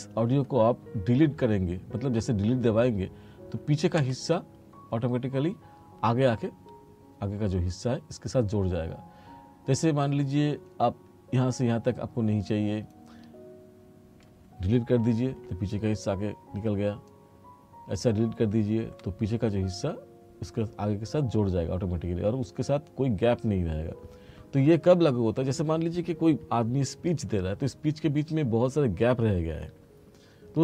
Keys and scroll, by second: 4.0 Delete, 15.4 Delete, 18.9 Delete.